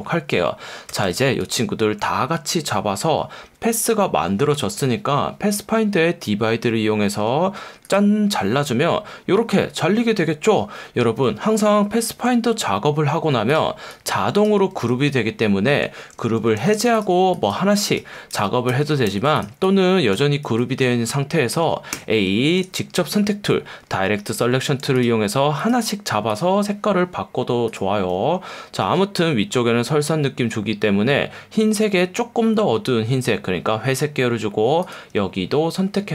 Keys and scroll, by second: 7.5 F1, 14.8 super+z, 16.6 shift+super+g, 18.3 super+z, 20.5 super+z, 21.9 a, 28.8 F1, 35.6 F1.